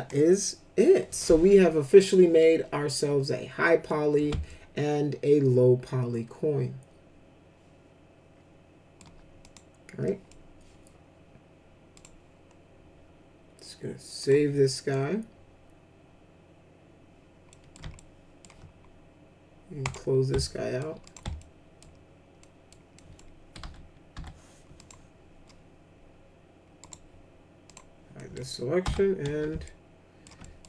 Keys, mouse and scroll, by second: 1.8 middle click, 3.8 middle click, 4.4-8.9 alt+middle drag, 9.4 click, 10.0 middle click, 11.9 click, 14.2 click, 14.7 middle click, 17.5 middle click, 17.9 alt+middle click, 19.8 click, 20.4 alt+middle click, 21.0 click, 21.4 alt+middle click, 22.4 middle click, 22.9 middle click, 23.6 F4, 24.1 F4, 24.7 click, 26.8 right click, 27.6 click, 28.2 middle click, 28.8 F4, 29.6 alt+shift+middle click, 30.4 middle click.